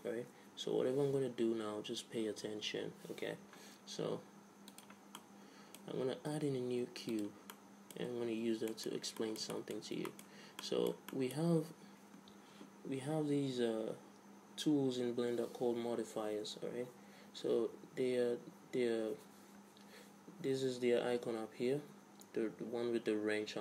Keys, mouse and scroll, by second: 4.7-7.1 drag, 6.2 shift+a, 7.5 middle click, 8.4 alt+r, 9.2 middle click, 10.2 middle click, 10.4-12.8 middle drag.